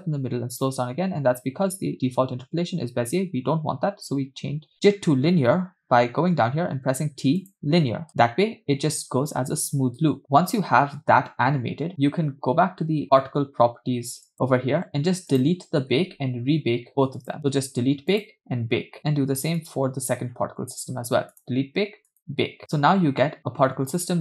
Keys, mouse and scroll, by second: 2.6 space, 6.4 t, 8.2 space, 10.0 space, 14.4 click, 15.6 click, 16.0-17.2 scroll down 3, 17.2 scroll down 1, 17.2 click, 18.3-19.0 drag, 19.0 scroll up 4, 19.7 click, 20.5 scroll down 2, 21.4 click, 22.3 click, 22.6 space.